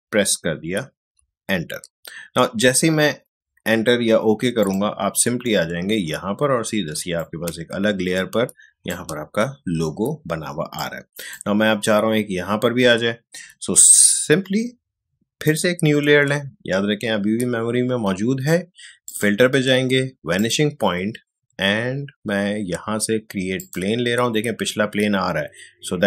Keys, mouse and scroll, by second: 4.6 click, 6.8 space, 7.2-10.5 ctrl+drag, 10.5 space, 10.7 click, 11.0 space, 15.5 click, 19.1 click, 23.6 click.